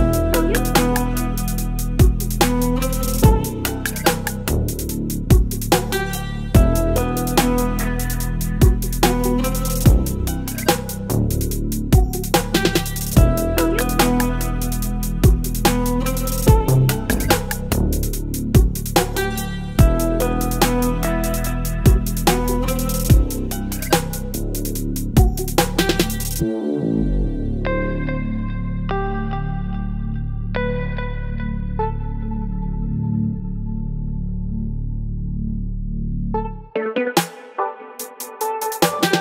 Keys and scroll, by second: 0.7 ctrl+BackSpace, 1.8 space, 7.9 ctrl+BackSpace, 8.9 ctrl+BackSpace, 11.6 Delete, 12.2 Delete, 14.7 Delete, 18.8 space, 21.9 Delete, 22.2 ctrl+z, 22.8 Delete, 23.1 space, 23.5 ctrl+z, 25.5 space, 25.7 v, 27.6 space, 30.0 ctrl+v, 33.2 Return, 33.5 l, 34.2 Delete, 35.8 space.